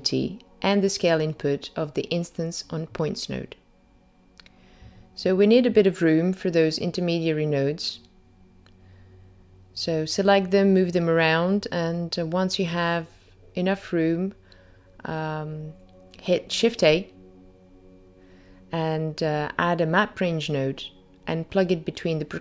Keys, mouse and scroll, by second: 1.2 click, 2.5 click, 3.4 click, 6.0 click, 7.4 click, 15.9 click, 18.4 shift+a.